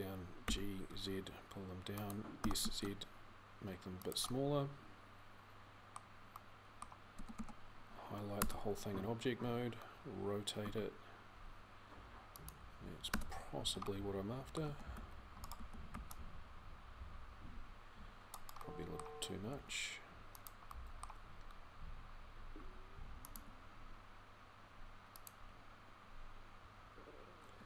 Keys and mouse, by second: 6.9 a, 7.2 a, 8.2 Tab, 10.5 r, 12.9 Tab, 13.4 a, 14.8 c, 15.4 a, 23.1 g.